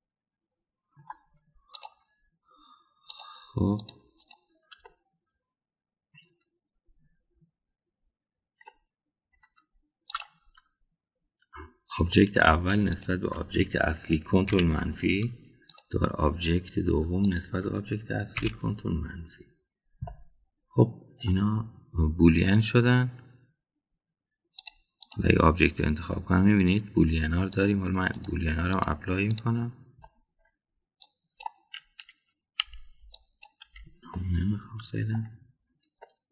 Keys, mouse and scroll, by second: 0.6-2.0 middle drag, 4.1 click, 4.7 drag, 5.1 click, 5.9-7.1 middle drag, 9.6 middle click, 11.1 click, 13.1 middle click, 13.8 shift+click, 15.4 ctrl+KP_Subtract, 16.7 click, 18.3 shift+click, 19.3 ctrl+KP_Subtract, 21.1-22.2 middle drag, 26.0 click, 28.6-29.3 drag, 29.7-30.4 drag, 31.0-31.4 middle drag, 32.0 click, 33.6 Delete, 34.1 click, 34.7 Delete, 35.1-36.2 middle drag.